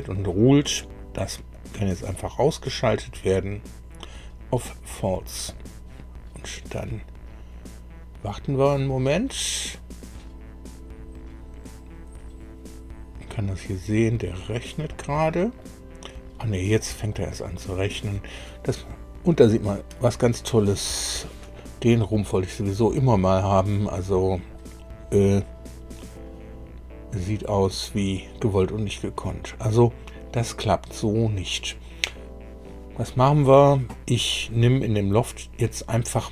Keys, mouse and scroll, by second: 1.5 click, 2.1 click, 5.5 click, 14.9 middle click, 16.7 middle click, 21.2-24.7 middle drag, 25.3-27.9 middle drag.